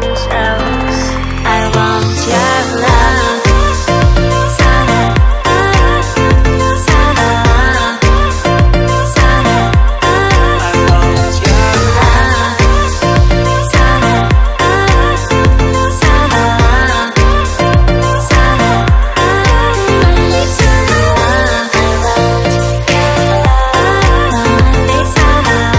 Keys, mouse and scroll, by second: 0.3 click, 0.3 right click, 0.4 right click, 1.6 click, 1.6 double click, 1.7 double click, 2.3 click, 4.5 click, 5.2 click, 5.8 click, 6.8 click, 8.9 click, 10.3 click, 11.1 click, 12.9 click, 13.5 click, 14.5 click, 15.2 click, 20.6 click, 21.9 click, 22.7 click, 24.2 click.